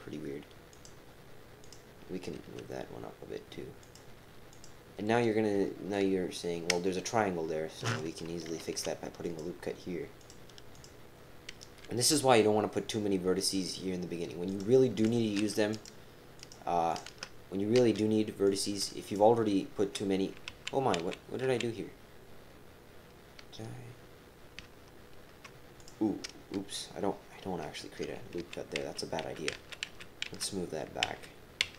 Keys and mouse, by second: 1.6 click, 2.3 g, 4.5 click, 8.6 ctrl+r, 10.7 click, 11.8 e, 15.0 click, 15.7 shift+click, 16.4 shift+click, 16.9 shift+click, 17.2-19.0 typing, 18.4 click, 19.0 shift+click, 20.5 ctrl+z, 21.0 ctrl+z, 21.4 ctrl+z, 25.8 click, 25.9 typing, 28.4 ctrl+z, 28.8 ctrl+z, 29.2 ctrl+z, 29.8 ctrl+z, 30.3 ctrl+z, 31.0 ctrl+z, 31.6 ctrl+z.